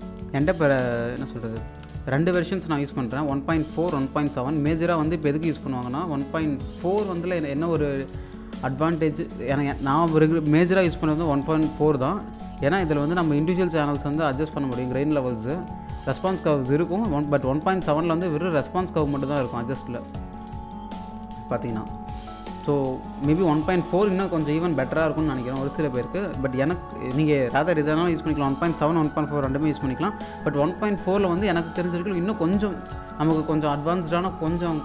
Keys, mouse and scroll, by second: 0.1 alt+click, 1.2-1.7 scroll up 1, 1.8 click, 5.7-7.0 drag, 7.0 space, 7.9 alt+click, 9.0 click, 12.2 click, 13.3 click, 15.6-16.1 scroll down 1, 16.7 click, 17.3-17.7 scroll up 1, 17.7 click, 19.1 click, 20.4-21.0 scroll down 1, 21.0-21.7 scroll up 1, 22.1 scroll down 1, 22.7 alt+click, 22.8 scroll up 1, 23.3-24.8 drag, 26.4 scroll down 1, 27.0 alt+click, 31.0 click, 33.6 scroll down 1, 34.5-34.8 scroll up 1.